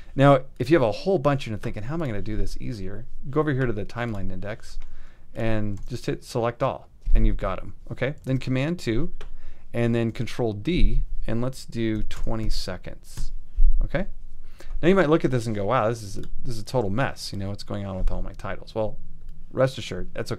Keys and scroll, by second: 6.0 super+a, 8.3 super+2, 11.1 ctrl+d, 11.9-12.6 typing, 13.2 Up.